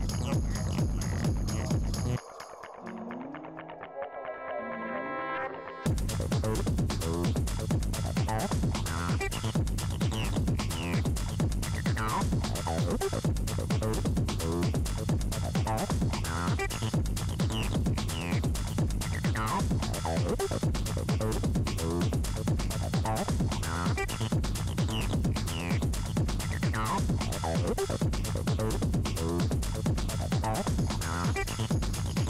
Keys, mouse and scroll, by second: 0.9 a, 2.0 a, 2.7 scroll up 3, 6.7-8.4 drag, 8.4-9.6 scroll down 4, 10.9 scroll down 1, 11.3 scroll up 1, 13.0-13.7 scroll down 5, 13.7-14.5 scroll up 10, 14.8-15.3 scroll down 1, 15.3-16.2 scroll up 3, 16.8-18.6 scroll down 16, 18.6-20.7 scroll down 10, 22.6 Tab, 24.1 scroll down 4, 24.3-26.7 scroll up 9, 26.9-27.4 scroll down 2, 27.1-28.7 scroll up 15, 28.7-29.9 scroll up 12, 29.9-31.9 scroll down 14, 31.9-32.2 scroll down 9.